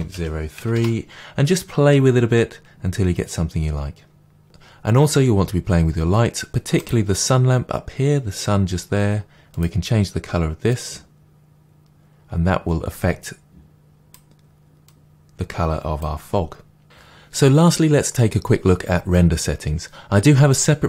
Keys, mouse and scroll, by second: 0.8 Return, 9.5-10.1 drag.